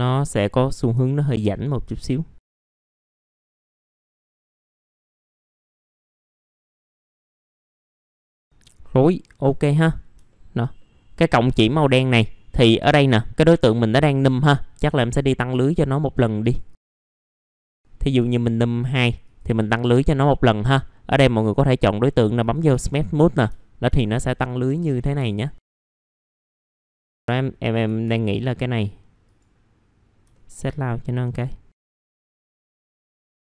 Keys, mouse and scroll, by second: 1.0 alt+middle click, 1.5-2.3 scroll up 2, 2.3 click, 2.6-2.9 scroll up 1, 2.9 click, 3.6 middle click, 3.6 scroll down 1, 3.9 middle click, 4.3-4.9 scroll up 2, 4.5 alt+middle click, 4.9 click, 5.6-6.4 alt+scroll down 2, 6.4 alt+middle click, 6.7-7.3 scroll down 2, 6.9 F4, 7.0 click, 7.3 scroll up 1, 7.5 middle click, 8.0 scroll up 1, 8.1-8.9 scroll down 1, 8.9-9.9 scroll up 1, 9.9 scroll down 1, 10.2 alt+middle click, 11.5 scroll up 1, 11.5 click, 12.2 alt+middle click, 16.4 click, 17.3 click, 18.5 middle click, 19.2 click, 23.5 alt+middle click, 24.6 F4, 25.2 alt+middle click, 25.7 alt+middle click, 25.9 scroll up 1, 26.2 alt+middle click, 26.6 scroll down 1, 27.2 click, 29.2 click, 30.3 alt+middle click, 31.8-33.2 drag.